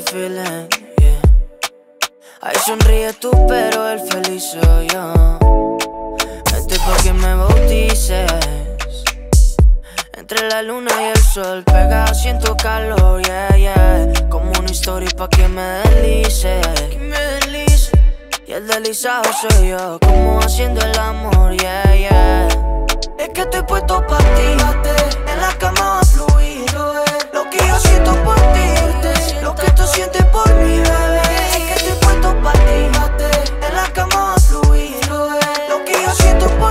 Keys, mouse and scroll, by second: 12.8-13.4 middle drag, 14.8 click, 15.5-16.0 scroll down 1, 16.0-16.6 middle click, 17.2-20.0 drag, 20.2 scroll up 1, 20.8-21.8 middle drag, 22.4-25.9 drag, 29.6-30.5 middle drag, 31.6-35.0 drag.